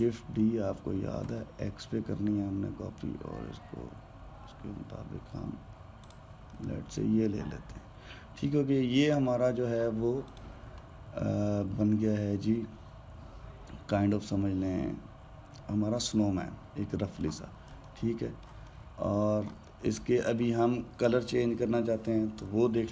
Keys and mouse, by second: 0.7 shift+d, 7.4-10.4 middle drag, 11.0 click, 11.6-14.7 middle drag, 18.6-22.9 ctrl+middle drag.